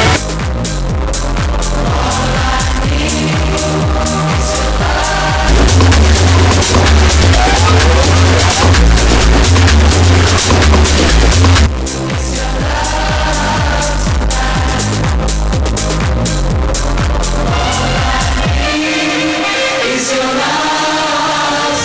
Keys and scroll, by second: 0.3 Page_Down, 12.1 Page_Down.